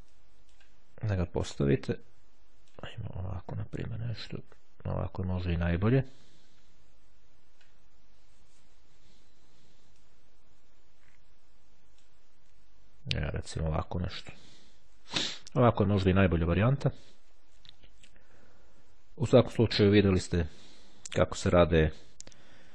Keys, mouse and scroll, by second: 0.2-3.3 drag, 4.1-6.4 drag, 9.4-9.9 ctrl+scroll down 2, 10.2-12.6 ctrl+drag, 14.2-14.8 ctrl+scroll up 2, 19.9 click.